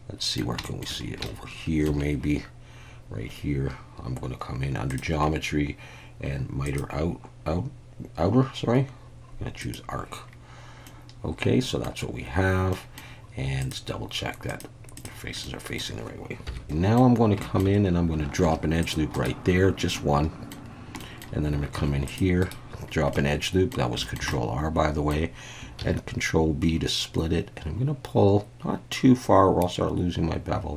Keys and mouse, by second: 0.6 shift+middle click, 1.2-1.9 shift+middle drag, 4.9 click, 6.7-9.7 drag, 10.9-11.8 middle drag, 12.7 middle drag, 13.7-15.2 drag, 15.4-15.8 middle drag, 17.3 Tab, 17.4 shift+middle click, 18.4 ctrl+r, 19.1 right click, 19.9 middle click, 21.0 middle click, 21.7 ctrl+r, 22.4 right click, 23.1 middle click, 24.0 shift+middle click, 24.3 middle click, 25.8 ctrl+b.